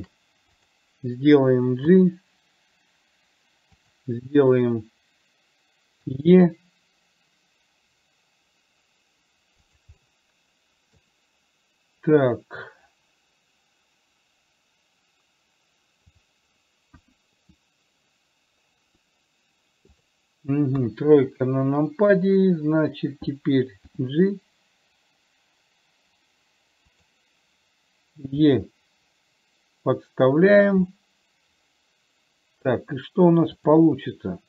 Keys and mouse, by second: 0.1 shift+middle click, 0.8 click, 2.2 g, 6.5 e, 10.3-11.3 middle drag, 17.3 KP_1, 20.2 click, 21.1 KP_3, 24.2 g, 28.8 e, 31.2-33.0 middle drag, 34.0 click.